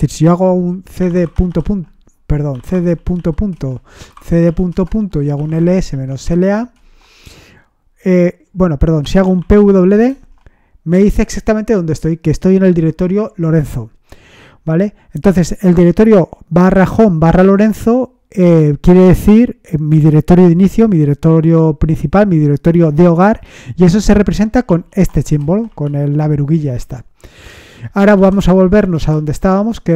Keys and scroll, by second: 0.7-10.1 typing, 24.6 shift+3, 28.0-29.9 typing.